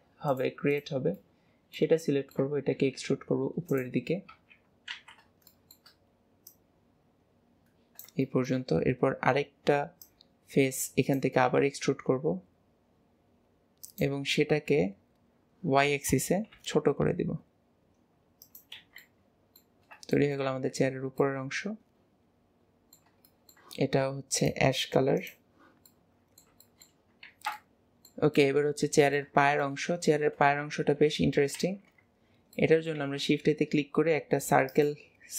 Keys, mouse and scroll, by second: 0.3 click, 0.8 click, 1.2-2.8 middle drag, 2.8 e, 5.6 shift+middle click, 6.5 click, 8.3 shift+middle click, 8.8-10.1 scroll up 2, 10.1 click, 14.8 KP_7, 19.1 middle click, 20.2-21.2 shift+middle drag, 20.6 Tab, 21.1 scroll down 1, 21.4-22.6 middle drag, 23.5 shift+middle click, 24.4-26.0 drag, 26.0 middle drag, 26.1 middle click, 27.4-28.2 middle drag, 28.7 middle drag, 29.2-29.6 shift+middle drag, 31.2 KP_7, 31.6 alt+z, 32.6-33.0 shift+middle drag, 33.0 shift+a.